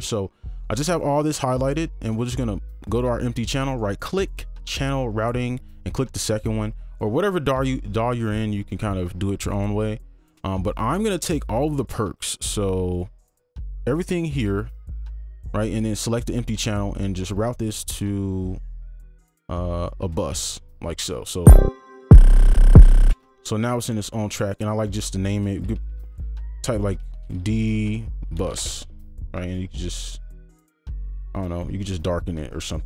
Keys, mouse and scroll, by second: 3.7 right click, 14.7 ctrl+click, 16.7 right click, 21.5 space, 23.1 space, 23.6 double click, 24.4 right click, 25.6 Caps_Lock, 27.1 BackSpace, 28.4 typing, 28.6 Return, 29.5 right click.